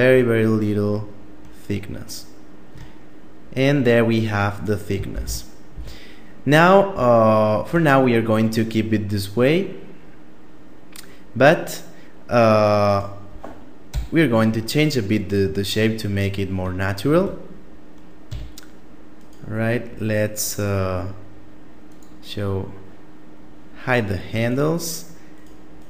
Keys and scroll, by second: 4.4 shift+space, 5.0 a, 13.2 KP_7, 16.5 Tab, 17.6 a.